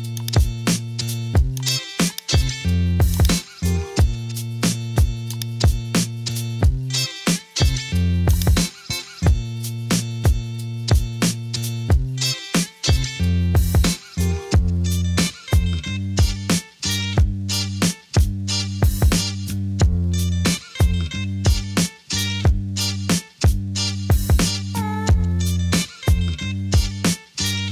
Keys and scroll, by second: 6.7-7.8 typing, 16.3 super+z.